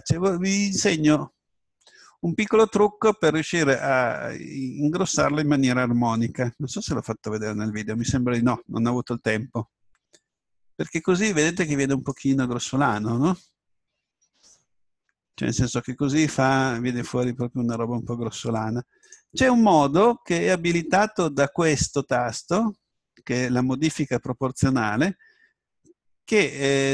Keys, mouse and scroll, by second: 11.6-15.6 drag, 15.6 s, 19.1 right click.